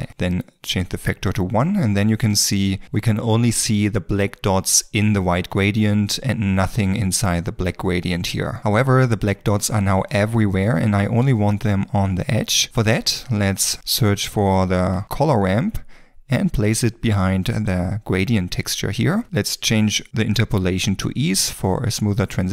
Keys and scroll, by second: 15.0 c.